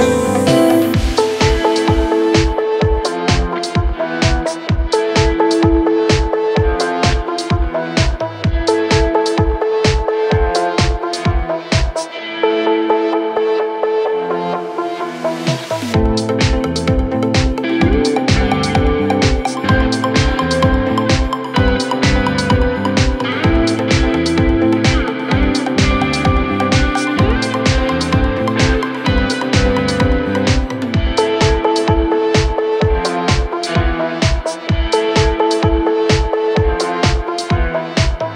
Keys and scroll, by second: 13.6 Delete, 15.7 F3, 16.1 Escape.